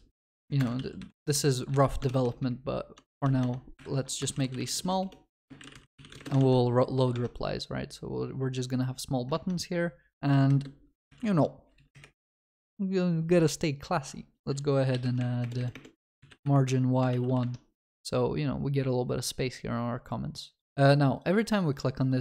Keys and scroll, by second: 0.6 Return, 1.0 ctrl+s, 3.8 ctrl+Delete, 6.5 ctrl+s, 9.4 ctrl+s, 12.2 Return, 17.2 ctrl+s.